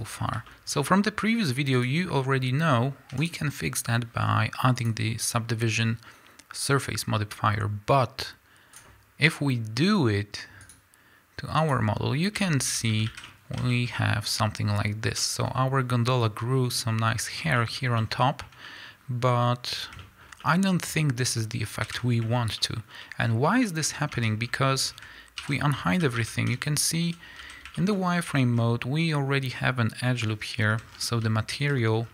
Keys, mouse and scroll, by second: 0.1-0.6 scroll down 2, 0.9-1.8 scroll up 2, 1.8 click, 8.9-10.9 drag, 12.4-22.8 shift+middle drag, 13.1 a, 14.9-15.2 scroll up 2, 21.8 KP_1, 23.9-24.3 scroll up 1, 24.3 Tab, 24.4 scroll up 1, 24.8 scroll down 1, 25.5 alt+h, 26.0 a, 27.2 z, 27.4 a, 27.8 shift+middle click, 27.9 scroll up 1, 28.4 shift+middle click, 28.6 scroll up 1, 30.7 a, 30.8 scroll down 1, 31.7 z, 32.0 scroll down 1.